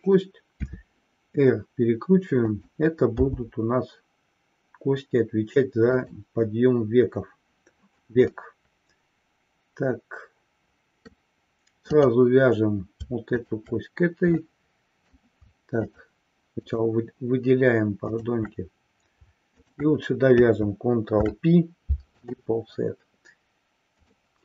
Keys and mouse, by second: 6.0 click, 8.3-11.4 middle drag, 12.2 click, 13.5 shift+click, 14.5 middle click, 15.9 shift+click, 16.9 shift+click, 18.2 shift+click, 19.6-20.0 shift+drag, 21.3 ctrl+p.